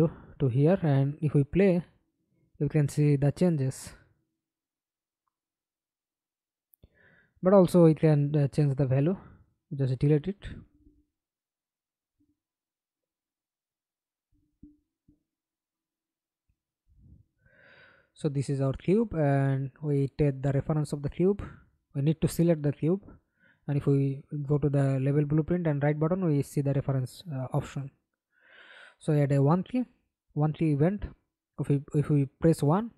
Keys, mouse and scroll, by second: 0.6 double click, 1.5 middle click, 2.4 F11, 2.8 alt+p, 4.6 Escape, 5.0 middle click, 5.8 F11, 8.1-10.2 scroll up 2, 14.5-16.1 scroll down 6, 16.2 f, 16.5-17.0 scroll down 6, 17.2 alt+click, 19.0 right click, 20.4 right click, 21.6 right click, 22.8-24.2 typing, 24.2 Return, 25.4 Delete, 25.9 right click, 27.4-28.7 typing, 28.7 Down, 29.1 Return.